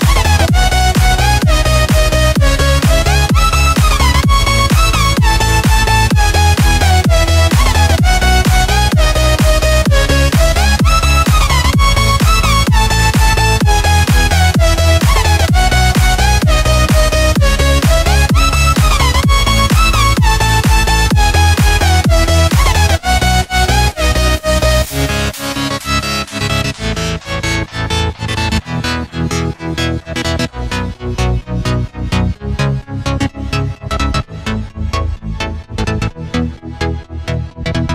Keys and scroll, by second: 30.2 a, 35.4 v.